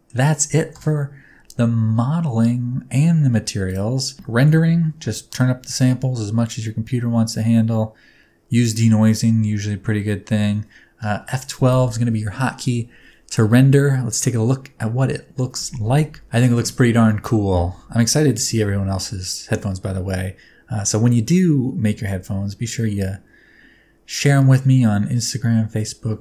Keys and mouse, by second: 0.7 KP_0, 3.6 click, 11.6 F12.